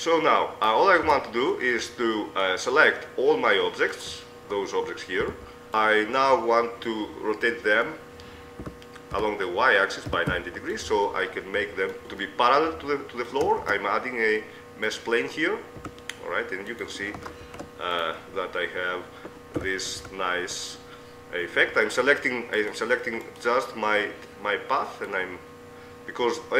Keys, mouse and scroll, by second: 1.3 Tab, 1.5 middle click, 3.7 middle click, 4.1-5.7 right drag, 5.5 b, 9.0 r, 12.5-13.9 middle drag, 13.9 shift+a, 16.1 s, 17.7 ctrl+a, 19.9 KP_4, 20.3 KP_3, 22.9-25.1 right drag, 25.1-26.5 middle drag.